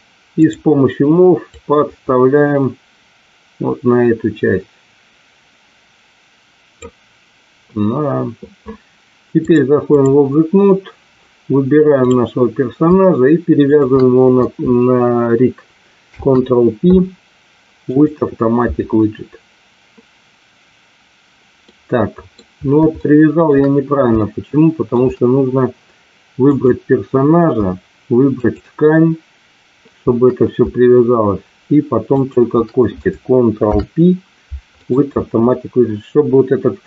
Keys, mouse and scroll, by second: 0.4 click, 1.5-6.8 drag, 9.4 click, 11.9 click, 13.7 shift+click, 16.0 ctrl+p, 21.6-22.3 middle drag, 23.0-23.4 shift+middle drag, 24.1-24.9 shift+middle drag, 26.4 click, 28.4 shift+click, 32.0-32.4 shift+drag, 33.6 ctrl+p.